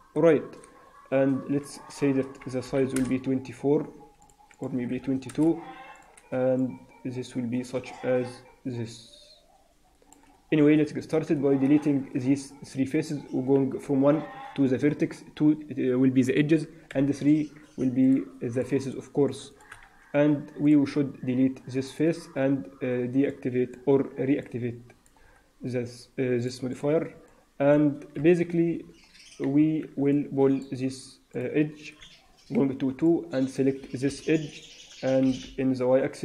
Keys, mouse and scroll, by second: 0.0 n, 0.5 n, 1.5 click, 4.4 click, 4.9 2, 5.9 click, 13.7 1, 15.1 2, 16.8 3, 17.9 click, 18.4 shift+click, 18.7 shift+click, 19.1 shift+click, 19.4 shift+click, 19.7 x, 21.1 Tab, 21.6 middle click, 23.2 click, 24.3 middle click, 25.1-26.0 scroll down 1, 26.0 scroll down 3, 26.3 click, 26.6 click, 27.2 alt+middle click, 28.1 KP_1, 28.5 KP_3, 29.1-29.5 scroll up 2, 29.5 Tab, 30.0 middle click, 31.2 click, 32.5 2, 32.9 click, 34.0 KP_3, 35.1 g.